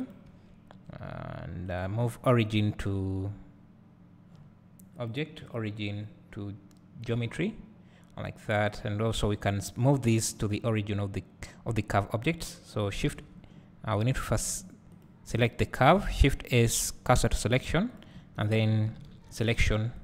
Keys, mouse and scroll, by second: 0.1 click, 0.3 Tab, 7.1-8.8 drag, 14.0 shift+s, 15.5 click, 18.0 click.